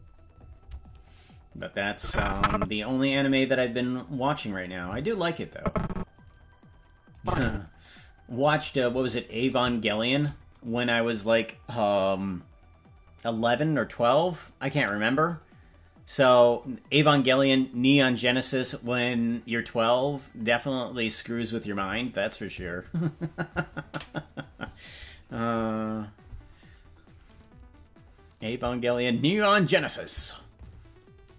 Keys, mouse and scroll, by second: 1.9 click, 5.5 click, 7.2 click, 9.0 right click, 10.0 shift+right click.